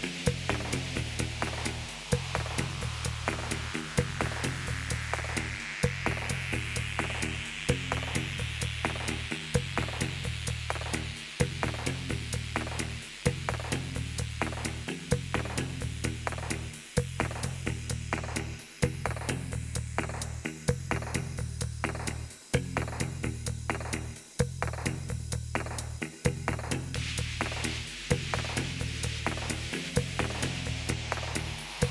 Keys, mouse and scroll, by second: 0.0-2.6 typing, 4.3-11.6 typing, 11.4 Return, 13.2-14.5 drag, 15.0-16.4 drag, 17.8-19.1 drag, 20.5 click, 21.9-23.5 drag, 25.1 click, 26.5 click, 28.3 ctrl+v.